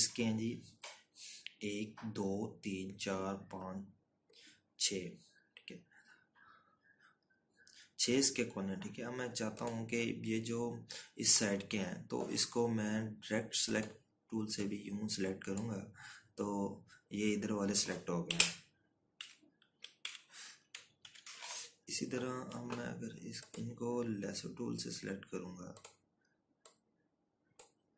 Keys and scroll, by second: 20.6 Right, 21.5 Left, 22.0 Right, 22.4 Left, 23.4 ctrl+-.